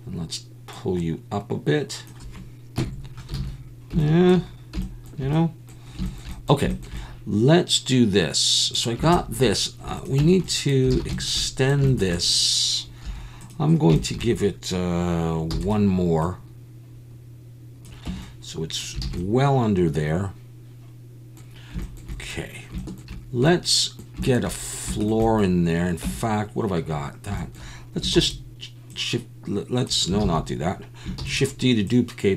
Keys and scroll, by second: 2.8 KP_3, 3.4 alt+a, 10.2 Tab, 10.9 alt+a, 13.0 2, 15.5 e, 18.1 Tab, 19.0 alt+a, 26.0 Tab, 28.1 shift+s, 30.2 ctrl+z, 31.2 shift+d.